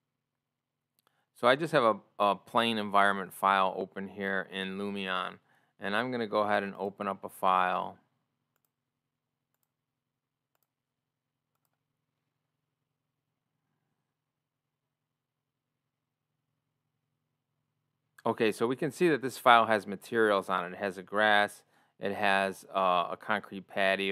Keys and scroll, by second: 0.0 ctrl+o, 17.1 ctrl+o.